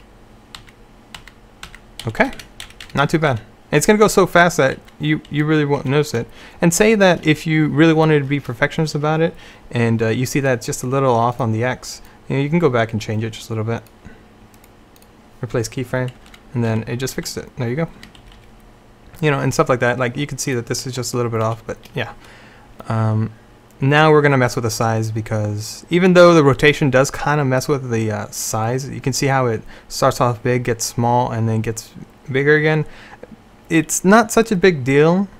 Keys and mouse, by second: 0.0 Right, 0.7 Right, 1.3 Right, 1.8 Right, 2.1-2.5 Left, 2.7 Left, 2.9 Left, 3.4 Left, 4.9 Right, 5.4 Right, 5.9 Left, 6.1 Left, 16.3 Right, 16.8 Right, 17.2 Right, 18.1 Right, 18.3 Left, 18.5 Left, 20.9 z, 21.6 z.